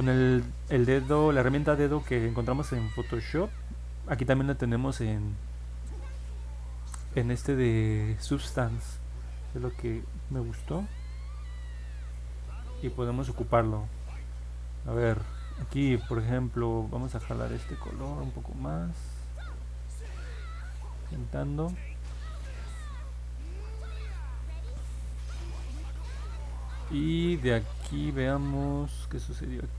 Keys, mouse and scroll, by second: 0.8-2.3 drag, 3.5-4.8 drag, 10.3-11.9 drag, 17.2-21.8 drag, 25.0 middle click, 25.0 scroll down 1, 25.8 middle click, 25.8 scroll down 1, 26.3 scroll up 1, 28.7-29.7 alt+middle drag.